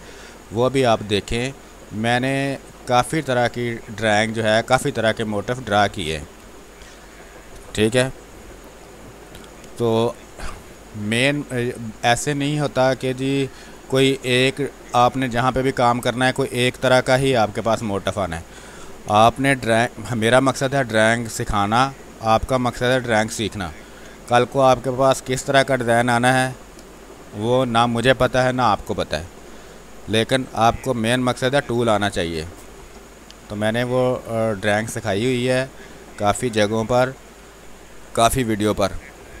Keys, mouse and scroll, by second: 4.2 space, 4.3 click, 6.4 space, 6.7 alt+click, 8.1 r, 8.2-9.7 drag, 9.7 space, 11.7-13.1 drag, 13.7 space, 15.7 alt+click, 15.9 click, 17.3 r, 17.9 click, 18.8 b, 19.1 space, 19.3-23.7 ctrl+drag, 25.0 space, 27.4 click, 30.0 space, 30.4 click, 30.5 space, 30.5 click, 30.6 space, 32.1 click, 35.7 space, 35.9 space, 37.3-38.7 ctrl+drag.